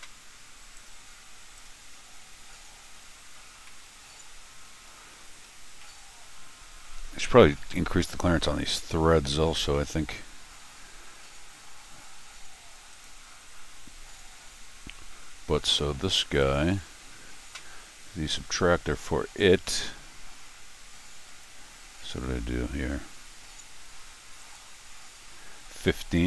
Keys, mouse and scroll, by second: 0.7 click, 1.5 click, 1.5-26.2 right drag, 3.4 middle click, 3.6-4.8 middle drag, 5.5 middle click, 5.8-7.9 middle drag, 9.6 middle click, 9.7 middle click, 10.6 middle click, 11.1 middle click, 12.9 click, 13.9-14.7 scroll, 16.4 click, 18.0 scroll down 1, 21.3 click, 24.4 click.